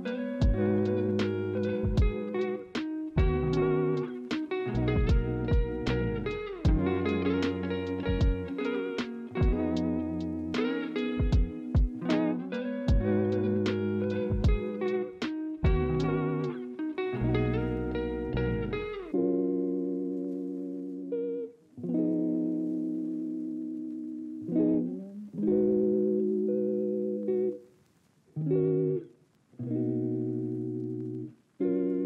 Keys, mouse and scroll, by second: 4.0 ctrl+c, 6.6 ctrl+f, 15.0 alt+scroll down 1, 15.8 alt+scroll up 1, 17.6-18.0 alt+scroll up 1, 19.7 alt+scroll down 2, 20.8 alt+scroll up 2, 24.6 alt+scroll down 2, 24.7-25.1 alt+scroll, 25.2 ctrl+z, 31.8 alt+scroll up 3.